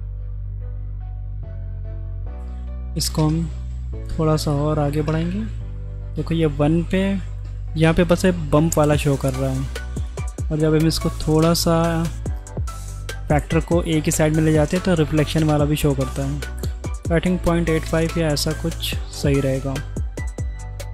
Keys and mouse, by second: 1.3 middle click, 2.2-3.4 drag, 4.9 click, 10.0 click, 12.2 middle drag, 16.9 click.